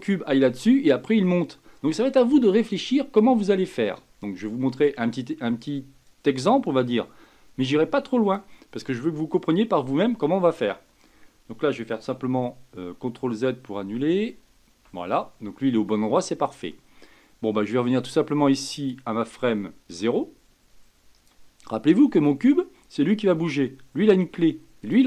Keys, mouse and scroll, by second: 6.0-9.1 drag, 13.0 ctrl+z, 13.9 ctrl+z, 18.9-21.9 drag, 22.1 click, 24.8 click.